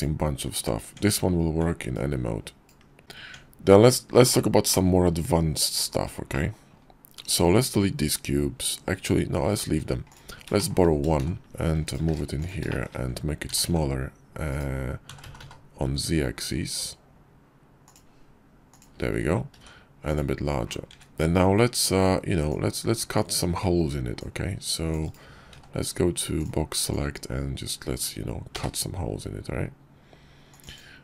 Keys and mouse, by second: 0.6 Tab, 1.9 ctrl+click, 3.0 Tab, 4.5-4.9 drag, 6.2 middle drag, 9.9 click, 11.1 shift+s, 12.0 shift+d, 12.5 shift+click, 13.3 s, 14.9 s, 17.8-19.0 drag, 19.4 s, 20.7 `, 22.3 click, 23.5 alt+w, 24.0-24.8 drag, 25.3 d, 26.7-30.5 drag.